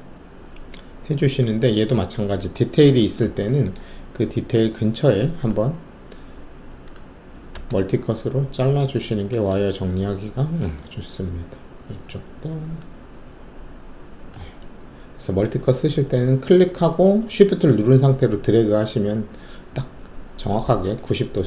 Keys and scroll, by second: 2.8 alt+shift+2, 7.5 alt+s.